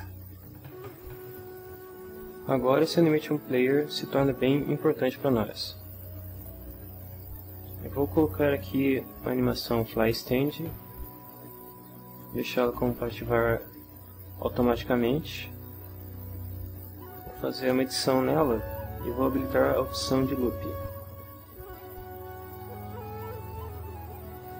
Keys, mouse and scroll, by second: 0.0-0.2 typing, 2.7 click, 7.1 click, 10.1 click, 13.6 click, 17.9 click, 20.7 click, 23.2 click.